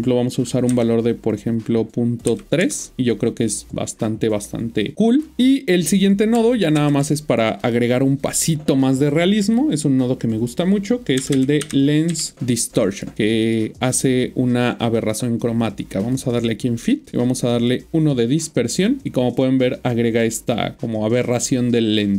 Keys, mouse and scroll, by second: 0.7 typing, 2.6 Return, 6.8 typing, 7.6 click, 11.6-12.1 typing, 12.9 click, 19.6 scroll up 1, 21.8-22.1 scroll down 3.